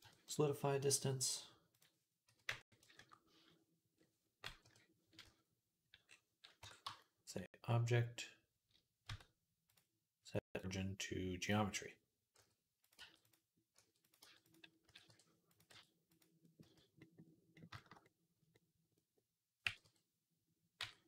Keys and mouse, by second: 4.5 KP_3, 5.1 z, 5.4-12.8 drag, 6.4 Tab, 6.7 a, 8.9 Tab, 12.2-16.5 typing, 12.8-16.2 middle drag, 17.0-18.0 middle drag, 18.0-21.0 drag, 19.5 g.